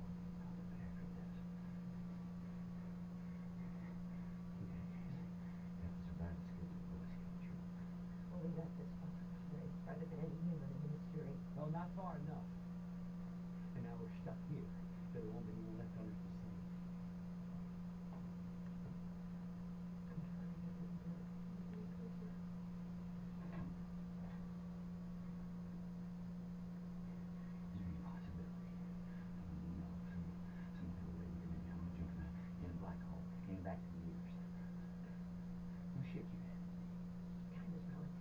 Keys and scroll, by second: 36.1 shift+Down, 37.1 Down, 37.7 Down.